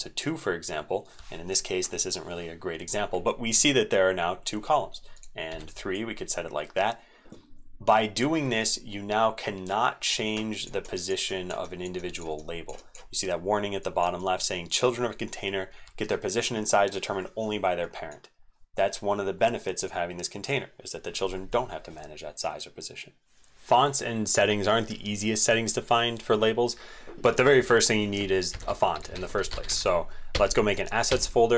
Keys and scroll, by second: 23.3 ctrl+s, 23.6 ctrl+shift+Tab, 28.5 ctrl+shift+n.